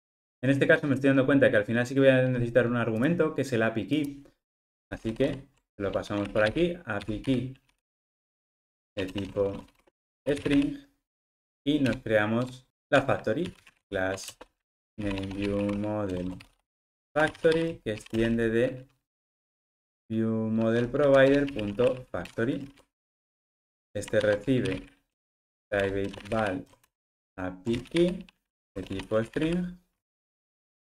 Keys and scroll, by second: 21.5 Return, 25.8 Return, 30.2 alt+super+l, 30.8 alt+Return.